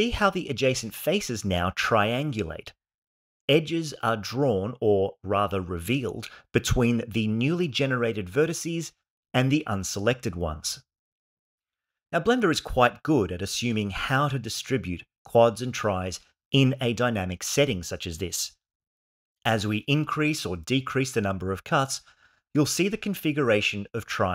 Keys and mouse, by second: 20.2 click, 21.0 click, 22.2 click, 24.0-24.3 shift+middle drag.